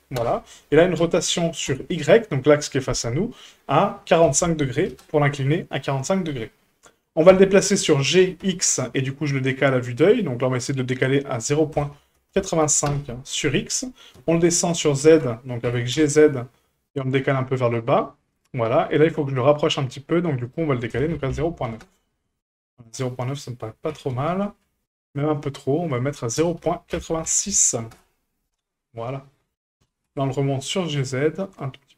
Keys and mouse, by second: 1.0 r, 7.3 g, 11.5-13.6 drag, 14.2 h, 15.0 ctrl+z, 15.6 g, 18.7 shift+middle drag, 19.6-19.9 shift+middle drag, 20.4-22.6 drag, 23.9 g, 26.0-28.8 drag, 29.8 g.